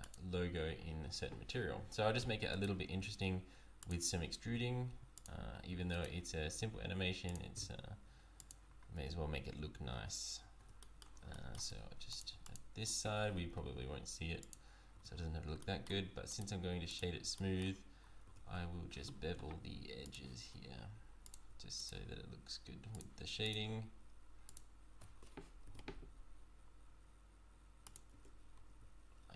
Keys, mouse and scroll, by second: 0.0 alt+click, 2.2 e, 2.9 s, 4.4 e, 5.7 e, 6.3 s, 7.5 e, 9.0 Tab, 9.9 Tab, 10.6 Tab, 10.8 middle click, 11.3 shift+middle click, 11.7 Tab, 12.1 click, 12.4 alt+click, 13.5 i, 14.9 Tab, 15.6 middle click, 16.3 right click, 17.3 shift+middle click, 18.0-18.6 scroll up 2, 18.2 Tab, 20.0 click, 21.2 alt+click, 21.8 alt+shift+click, 25.6 ctrl+b, 28.1 Tab.